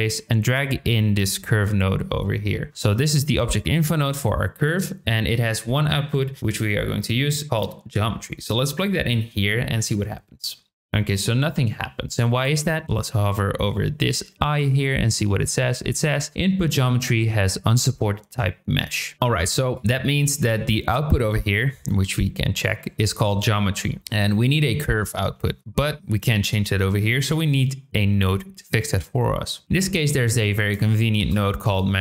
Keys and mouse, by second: 0.1-1.4 drag, 3.4 shift+middle click, 5.9 middle click, 6.7 click, 7.5-9.2 drag, 24.0 shift+middle click, 25.3 shift+a.